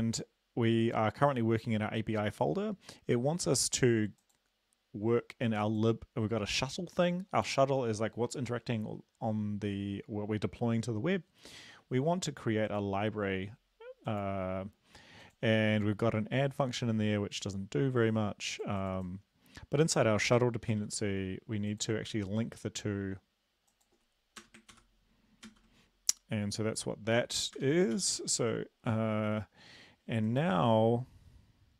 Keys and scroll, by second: 20.7 ctrl+c, 24.4 Return, 24.7 ctrl+v, 25.5 ctrl+s, 27.6 Return, 27.9 ctrl+s.